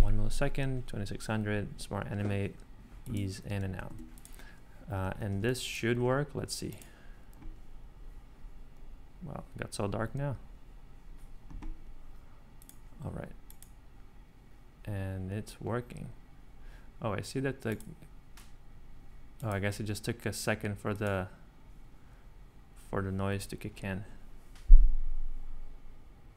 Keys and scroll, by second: 3.9 Escape, 5.4 space, 24.8 r.